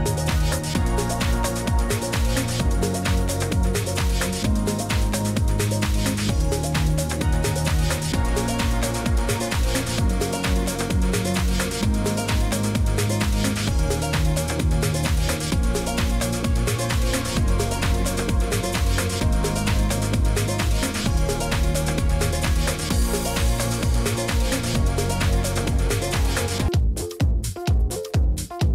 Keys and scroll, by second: 4.5 ctrl+v, 7.3 BackSpace, 8.5 ctrl+v, 14.0-14.9 typing, 16.5-17.2 typing, 17.4 ctrl+g, 18.2 ctrl+d, 18.4 shift+Right, 18.5 shift+Right, 19.5 Left, 19.6 Left, 20.2 z.